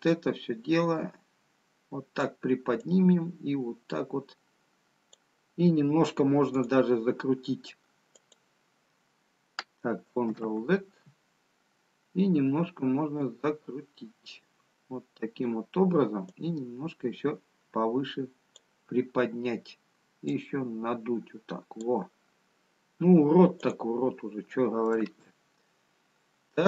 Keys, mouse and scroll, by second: 0.0 click, 1.4 click, 3.7 click, 7.6 click, 8.9 click, 11.0 ctrl+z, 13.9 click, 21.2 click, 26.5 Tab, 26.5 middle click.